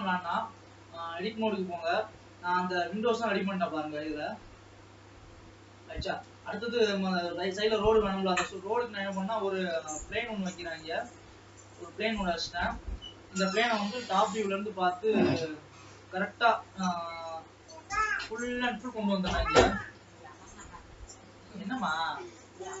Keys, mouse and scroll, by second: 0.2 click, 0.6 Tab, 1.5 alt+a, 2.6-6.6 middle drag, 6.6 shift+a, 7.6 shift+a, 8.3 scroll down 2, 8.7 s, 9.7 middle click, 10.6 s, 12.3-14.2 middle drag, 14.2 KP_7, 15.0 scroll down 4, 15.5 scroll up 2, 16.2 g, 19.4 scroll down 3, 19.8 s.